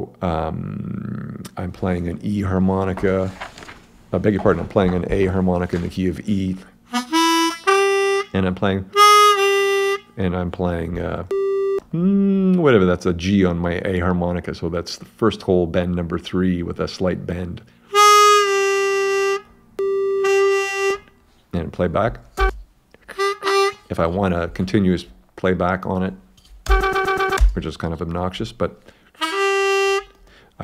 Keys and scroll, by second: 22.4 space, 26.7 space.